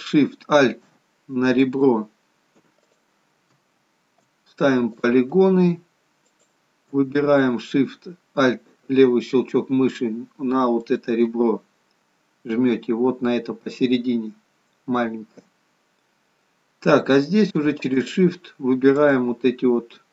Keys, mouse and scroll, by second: 1.5 alt+shift+click, 2.8 click, 5.0 click, 6.4 alt+shift+click, 6.9 alt+shift+click, 10.7 alt+shift+click, 11.8-13.8 scroll up 5, 15.7-16.4 scroll down 4, 18.0 shift+click.